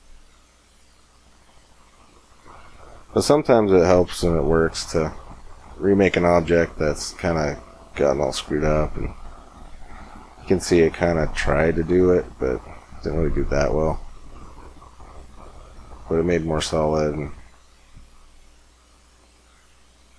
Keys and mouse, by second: 1.0 Tab, 6.4-7.8 middle drag, 8.0 middle click, 9.3-10.3 middle drag, 12.6 middle click.